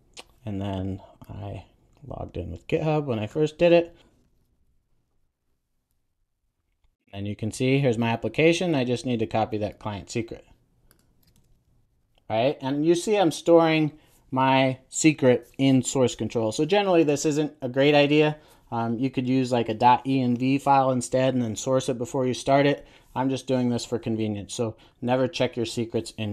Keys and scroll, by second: 11.2 super+v.